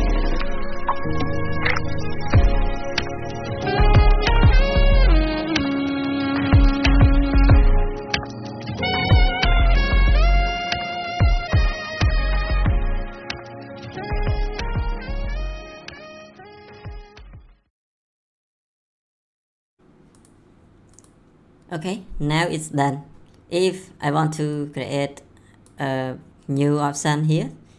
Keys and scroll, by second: 11.5 ctrl+v.